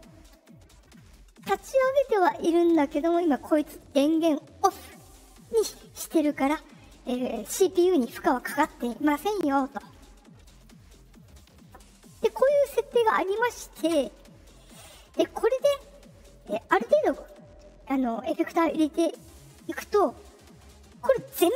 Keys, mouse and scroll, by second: 16.3 click.